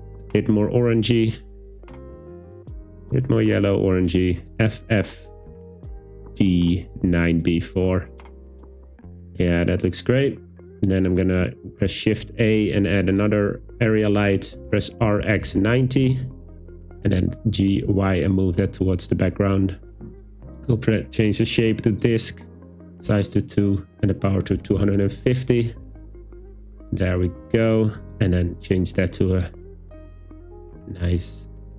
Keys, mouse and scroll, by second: 11.7 shift+a, 14.7 r, 15.1 x, 15.4 9, 15.6 0, 16.0 Return, 17.1 g, 17.8 y, 19.4 click, 20.9-22.1 drag, 22.6 click, 23.7-24.8 drag.